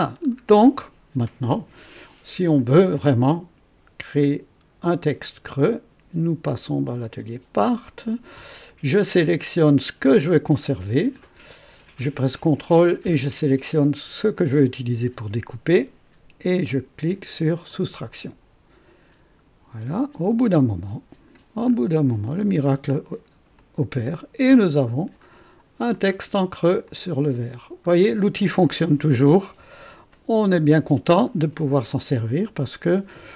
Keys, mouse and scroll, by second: 0.2 scroll down 1, 5.2 click, 7.0 click, 10.0 click, 14.4 ctrl+click, 17.7 click, 20.5-21.5 drag, 21.6-22.0 scroll up 2, 22.3-23.3 right drag, 23.6-26.1 drag, 26.4-26.8 scroll down 2, 26.8 click, 27.9 scroll down 1, 28.4-29.0 drag, 29.5 KP_1, 30.1 right click, 31.3 scroll up 1, 31.9 right click.